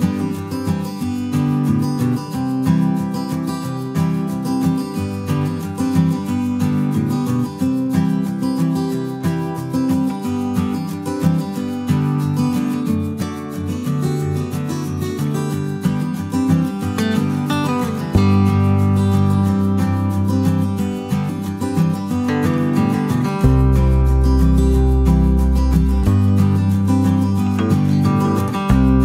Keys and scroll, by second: 0.0-4.2 typing, 25.8-28.9 typing.